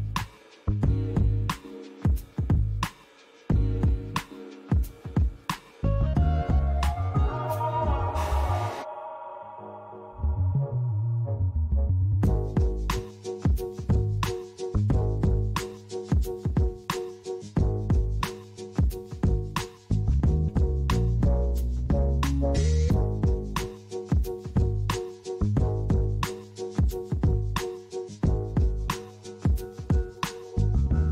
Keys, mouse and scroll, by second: 6.1 middle click, 8.7 click, 12.1 KP_0, 15.3 click, 29.9 click, 30.9 click.